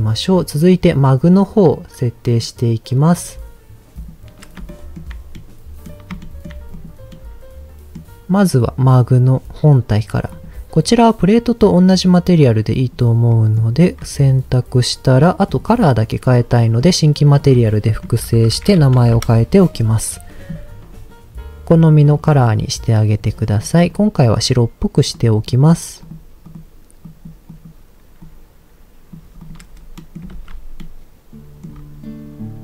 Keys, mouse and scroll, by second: 0.4 click, 2.2 click, 3.2-4.0 scroll down 3, 4.0 click, 4.6 shift+middle click, 5.3 middle click, 6.2 shift+middle click, 6.7 click, 7.0 middle click, 10.3-12.9 drag, 13.3 middle click, 13.9-14.3 scroll up 2, 15.4 click, 16.3 scroll down 2, 16.5 middle click, 17.4-19.2 drag, 22.1 click, 25.4 click, 26.0 click, 26.4 click, 29.4 click, 29.7-30.0 scroll down 2, 30.0 middle click, 30.4 ctrl+s, 30.8 middle click, 31.6-32.6 scroll up 3.